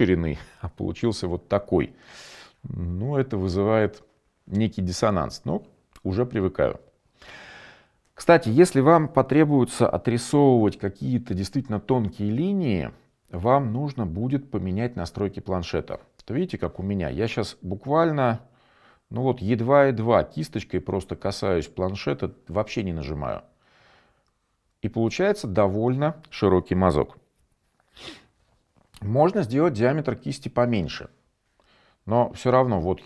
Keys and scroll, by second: 29.7-30.3 typing.